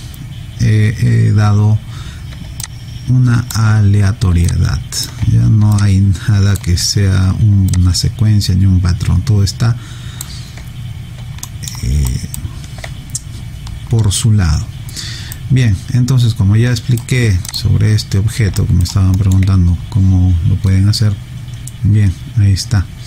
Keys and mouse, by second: 2.6 alt+click, 4.5 alt+click, 5.7 alt+click, 7.7 alt+click, 11.4 alt+middle click, 12.1 alt+right click, 15.5 right click, 17.5 click, 18.6 alt+right click, 19.2 alt+middle click.